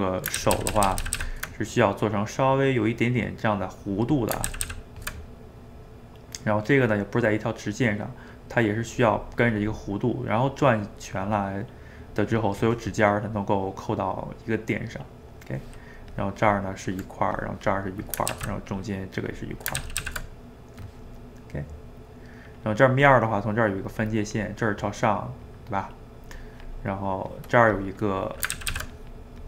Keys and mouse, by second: 0.4-1.2 ctrl+z, 1.6-4.5 middle drag, 4.5 ctrl+z, 4.7 ctrl+z, 5.3-16.1 middle drag, 16.1-18.4 drag, 18.4 ctrl+z, 18.7-19.9 drag, 19.9 ctrl+z, 20.1 ctrl+z, 20.4-23.0 middle drag, 23.0-24.9 drag, 24.9 middle click, 25.4-28.6 drag, 28.6 ctrl+z, 28.8 ctrl+z, 29.0-29.4 drag.